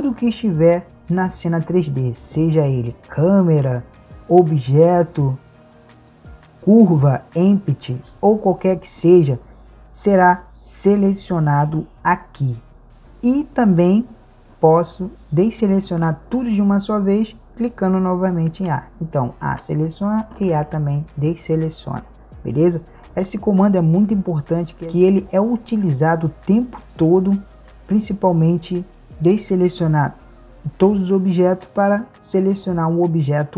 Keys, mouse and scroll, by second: 6.0-7.8 drag, 11.6-18.6 drag, 18.6 a.